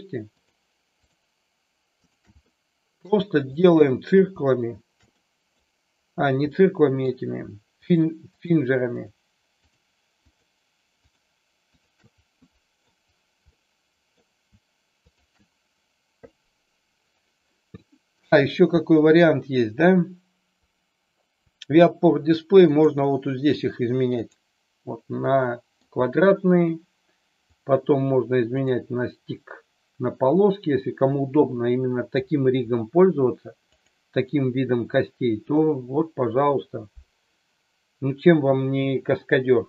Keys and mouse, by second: 0.3-0.8 shift+drag, 2.0-2.6 shift+drag, 2.6-3.0 middle drag, 3.6 shift+click, 5.0 middle click, 6.4-7.0 middle drag, 7.8-8.7 shift+drag, 10.1 shift+click, 11.7-12.0 shift+drag, 12.4 middle click, 13.5-14.2 middle drag, 15.0 shift+click, 17.4-18.2 middle drag, 22.5-24.4 drag, 25.2-25.8 middle drag, 27.4-28.7 drag, 33.8-39.6 drag.